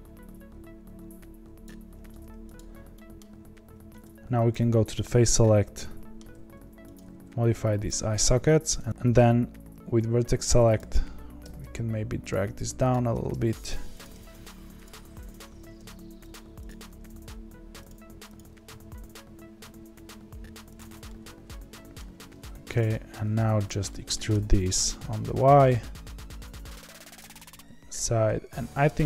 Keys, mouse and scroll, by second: 2.5 click, 2.9 middle click, 3.6 3, 4.5 click, 5.2-6.3 middle drag, 6.3 s, 7.0 s, 8.5 1, 8.9 click, 10.1 1, 10.7 click, 11.4 g, 12.9 click, 13.1 g, 14.0 click, 14.2 g, 15.3 click, 15.6 g, 16.6 click, 16.9 g, 18.3 click, 18.5 g, 21.0 middle click, 22.0 3, 22.7 click, 23.8 middle click, 24.3 e, 27.3-29.0 middle drag.